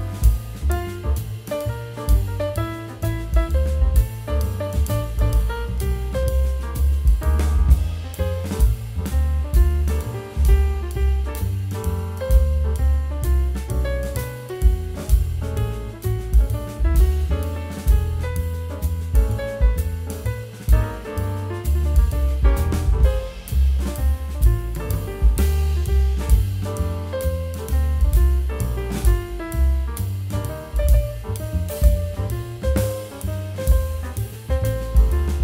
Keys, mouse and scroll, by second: 5.3 ctrl+t, 8.4 alt+scroll down 1, 10.0 shift+click, 26.3 ctrl+t, 29.0 ctrl+t, 29.1 alt+scroll up 1, 30.1 scroll down 1, 35.1 alt+F9, 35.1 click.